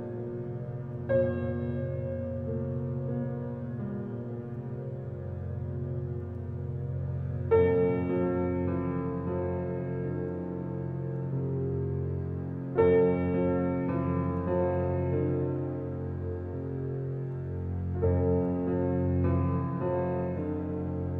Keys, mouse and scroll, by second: 1.0 click, 1.3-1.7 scroll down 1, 4.0 click, 4.3-5.0 scroll down 1, 6.7 click, 7.0-7.5 scroll down 1, 7.6-8.1 scroll up 1, 8.1 click, 8.4 scroll up 1, 9.2 click, 9.7 right click, 11.1-12.9 scroll up 1, 13.0 click, 13.3 scroll down 1, 16.1 click, 16.1 typing, 16.4-17.2 scroll down 1, 17.7 scroll up 1, 19.1 click, 19.4-19.8 scroll down 1, 20.9 scroll up 1.